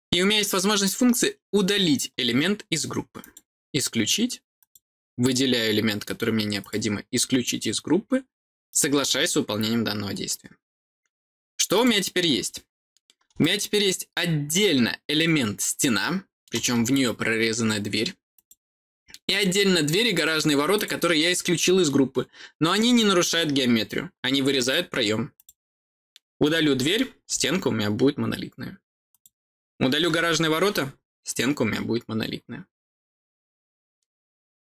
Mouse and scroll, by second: 3.1 click, 4.5 click, 6.5 click, 8.6 click, 11.7 click, 13.3-16.4 middle drag, 16.9 scroll up 2, 18.3 click, 18.9 scroll down 2, 20.0 click, 20.7 click, 24.5 click, 25.3 click, 29.0 click, 33.4 middle click, 33.7 scroll down 2.